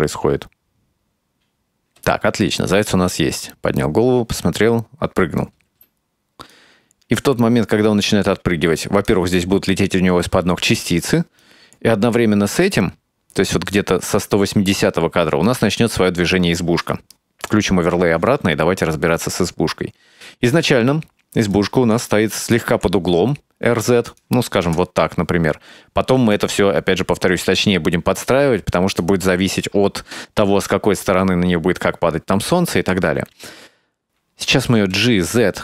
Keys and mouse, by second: 1.9 space, 5.7 space, 6.6-9.2 drag, 11.5-14.6 drag, 15.5 right click, 17.6 click, 20.6-21.6 middle drag, 22.7 r, 24.7 KP_0, 26.2 r, 34.6 g.